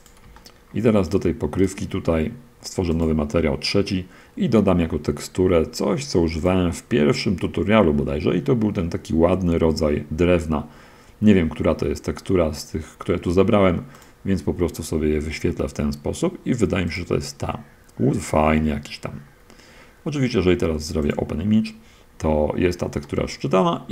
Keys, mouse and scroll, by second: 0.3 drag, 0.6-1.0 shift+middle drag, 1.0 shift+click, 1.9 click, 3.2 click, 6.7 click, 14.3 click, 17.2 click, 21.4 drag, 23.3-23.9 middle drag.